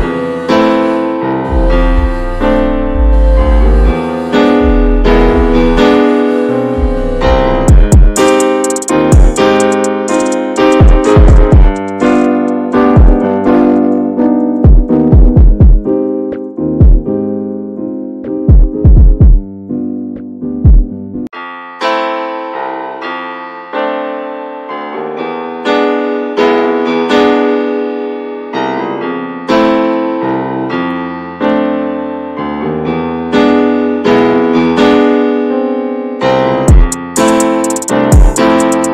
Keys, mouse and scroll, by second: 0.8-1.2 scroll down 2, 1.2 Tab, 1.3 click, 1.7 click, 2.2 Tab, 2.5 shift+middle click, 2.8 scroll up 1, 3.0 click, 3.7 l, 4.1-4.4 scroll down 4, 4.4-5.1 scroll up 5, 5.1 shift+middle click, 5.6 click, 7.0 scroll down 4, 7.2 Tab, 7.4 click, 7.6 middle drag, 7.9 ctrl+s, 8.1 Tab, 8.4 shift+middle click, 8.6-8.9 scroll up 3, 8.9-10.0 middle drag, 10.0 ctrl+r, 11.7 click, 13.6 middle click, 13.7 scroll up 2, 13.9 shift+middle click, 14.9 ctrl+b, 18.4 scroll up 2, 19.2 s, 20.6 3, 21.0 click, 21.3 shift+click, 21.6 middle click, 22.2 shift+click, 22.5 middle click, 23.3 e, 25.3 click, 25.8 Tab, 26.0-26.8 scroll down 9, 26.2 middle click, 26.8-27.7 shift+middle drag, 27.7 scroll up 2, 27.9 ctrl+s, 28.1 click, 28.2 Tab, 28.5 shift+middle click, 28.7 scroll up 2, 28.9 shift+middle click, 29.6 scroll up 1, 29.7-30.3 scroll down 1, 30.3 3, 30.4 click, 30.7 shift+click, 31.1 scroll down 2, 31.3 shift+middle click, 31.7 scroll up 1, 31.9 middle click, 32.3 ctrl+r, 34.6 middle click, 34.8 scroll up 2, 35.0-36.2 shift+middle drag, 36.2 3, 36.8 shift+click, 37.2 shift+click, 37.4 shift+click, 37.6 shift+click, 37.9 scroll down 1, 38.1-38.9 middle drag.